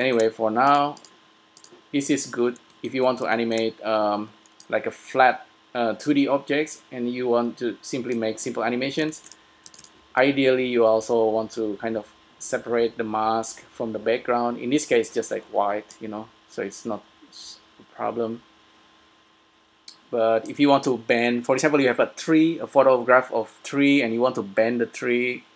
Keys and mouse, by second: 1.1-5.7 middle drag, 5.7 click, 9.2-12.2 middle drag, 9.7 s, 14.9-16.1 middle drag, 16.1-18.0 drag.